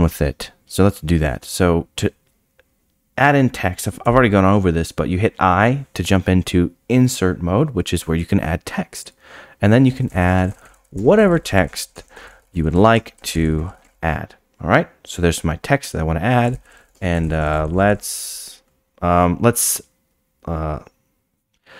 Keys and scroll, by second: 4.0 i, 11.0 Return, 11.9 Return, 12.1 ctrl+a, 12.9 Return, 16.9 Return.